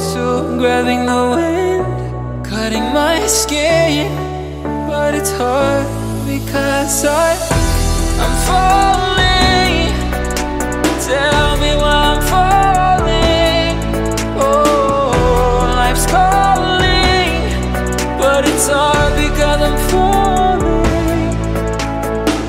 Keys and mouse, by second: 1.7-5.6 drag, 5.6 g, 9.8-10.3 ctrl+middle drag, 10.3 r, 11.4 g, 14.2 click, 15.1-18.3 ctrl+middle drag, 19.7 click, 20.2 g.